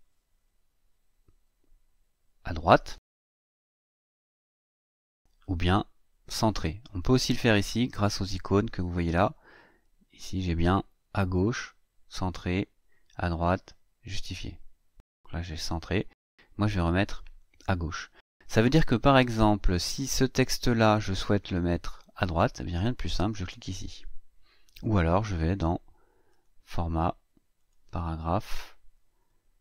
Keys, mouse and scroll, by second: 2.5 click, 3.7 click, 14.8 click, 17.0 click, 20.2 click, 23.3 click, 26.1 click, 27.4 click.